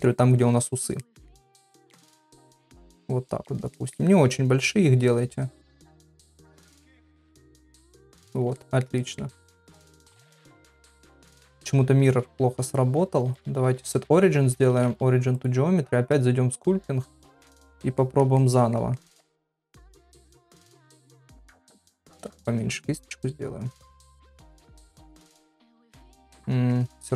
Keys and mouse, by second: 1.0 middle click, 1.9-3.1 drag, 3.5 click, 3.8 middle click, 4.6-6.0 drag, 6.2 middle click, 7.2-8.4 drag, 8.6 middle click, 9.0 ctrl+middle click, 9.3 middle click, 10.3 middle click, 10.9 ctrl+middle click, 11.2 middle click, 11.5 ctrl+Tab, 11.5-12.8 right drag, 13.3 click, 14.6 ctrl+Tab, 18.0 middle click, 18.4 ctrl+middle click, 19.0 ctrl+middle click, 19.4 middle click, 20.0 middle click, 20.9 click, 21.5 ctrl+z, 22.2 [, 22.4 [, 23.0 click, 24.0 click, 24.8 click, 25.4-26.7 middle drag.